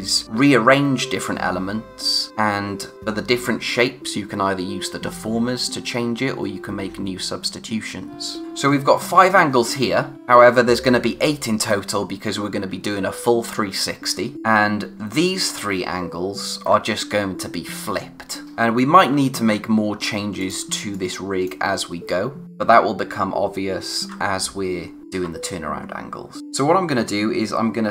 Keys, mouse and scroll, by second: 8.4 scroll down 1, 18.4 click, 20.3 click, 20.6 space, 20.9 click, 21.1 space, 26.4 click.